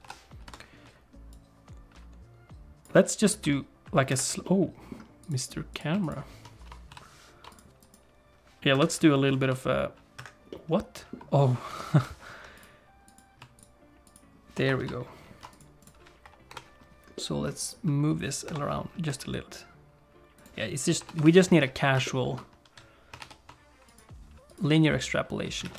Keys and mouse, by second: 0.0 i, 1.3-2.9 drag, 3.4 r, 4.4 middle click, 5.7 click, 6.0 shift+click, 6.9 ctrl+p, 8.7 KP_7, 9.4 r, 10.5 middle click, 11.9 alt+p, 14.1 shift+click, 14.8 ctrl+p, 15.8 click, 16.5 KP_7, 17.1 click, 18.4 KP_7, 19.0 r, 20.9 i, 23.5 shift+e, 25.5 space.